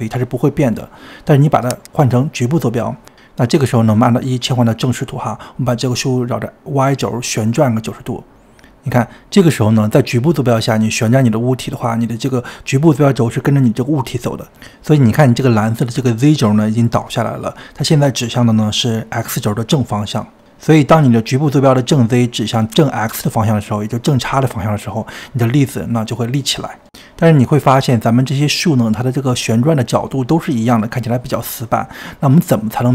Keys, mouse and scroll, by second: 1.5-3.3 drag, 4.7 middle click, 5.0 KP_1, 5.4 click, 5.9 n, 7.2 click, 7.4 click, 7.5 r, 16.5-18.5 scroll down 2, 18.5 shift+middle click, 19.4-21.6 scroll up 18, 21.7-23.7 middle drag, 23.7-24.8 scroll up 6, 24.8 click, 25.4-27.0 middle drag, 27.0-28.7 drag, 28.7-29.0 scroll down 2, 29.1-32.1 middle drag.